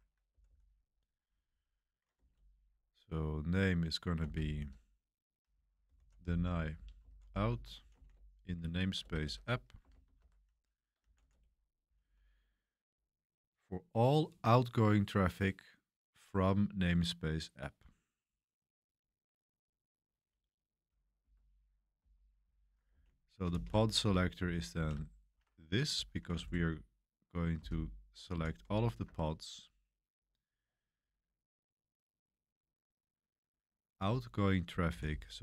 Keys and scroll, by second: 0.0-12.5 typing, 21.2-30.0 typing, 25.3 Escape, 34.9-35.4 typing.